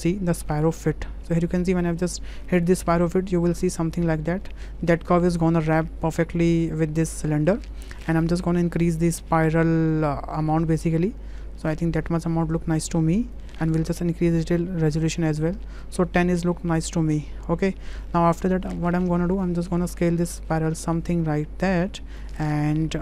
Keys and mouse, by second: 2.0 shift+click, 2.5 middle click, 2.8 shift+middle click, 7.6-7.9 shift+middle drag, 9.9-13.3 drag, 14.2-15.5 drag, 16.8-18.0 middle drag, 19.3 click, 20.4-22.2 drag, 22.8 middle click.